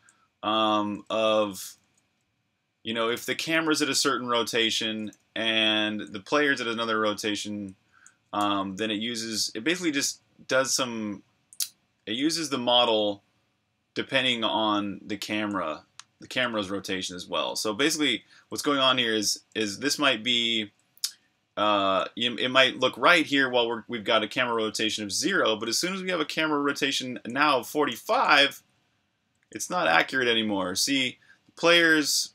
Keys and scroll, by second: 0.0-6.1 typing, 7.6-8.9 typing, 12.0-12.7 typing, 15.3-21.6 typing, 23.6-24.3 typing, 26.0 v, 27.2-29.8 typing, 31.5 v.